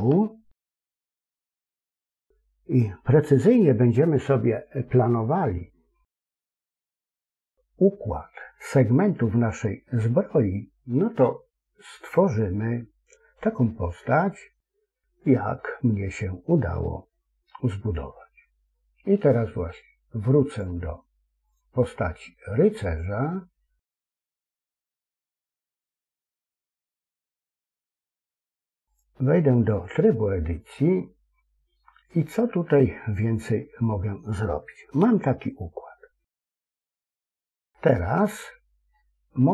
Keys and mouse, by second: 0.1-1.3 shift+middle drag, 20.4 click, 21.4 click, 22.8 click, 24.8 Tab, 27.7 Tab, 32.3-34.3 middle drag, 34.9 KP_1, 37.6-38.9 middle drag.